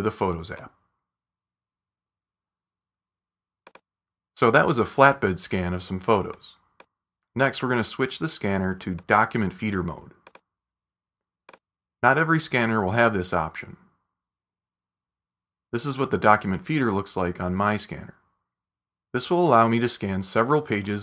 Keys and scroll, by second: 2.0 super+s, 2.4 super+w.